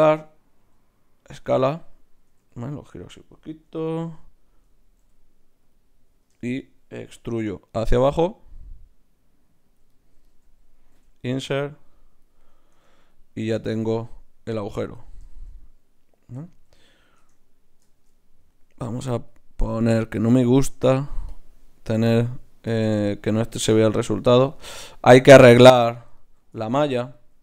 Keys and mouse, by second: 0.6 s, 1.8-3.8 drag, 2.4 r, 5.0 r, 7.1 e, 9.9 click, 10.9 i, 12.7 Tab, 17.2 Tab, 19.3-23.0 drag, 25.7 Tab, 26.5 Tab.